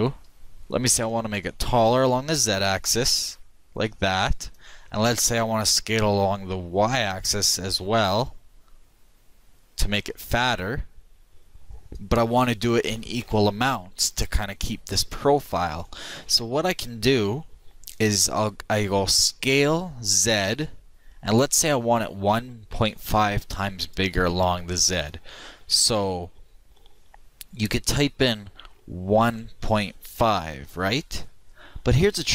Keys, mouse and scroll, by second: 1.0 s, 5.7 s, 13.2 ctrl+z, 19.4 s.